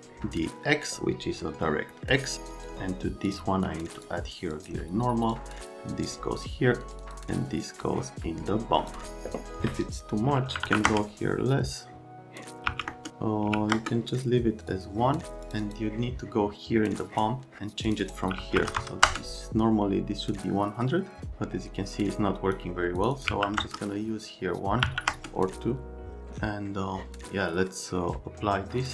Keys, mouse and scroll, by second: 1.7 right click, 2.5 click, 3.3 click, 4.5 click, 5.3 click, 6.4 click, 6.8 click, 7.0 click, 7.8 click, 10.6 KP_Decimal, 10.7 KP_1, 10.8 KP_Enter, 12.7 KP_1, 12.9 KP_Enter, 13.5 KP_1, 13.7 KP_Enter, 14.6 click, 15.4 click, 15.6 click, 17.0 click, 17.9 click, 18.0 click, 18.4 KP_1, 18.6 KP_0, 18.8 KP_0, 19.1 KP_Enter, 22.2 click, 23.0 middle click, 23.1 middle click, 23.3 KP_1, 23.6 KP_Enter, 24.8 KP_2, 25.1 KP_Enter, 28.8 click.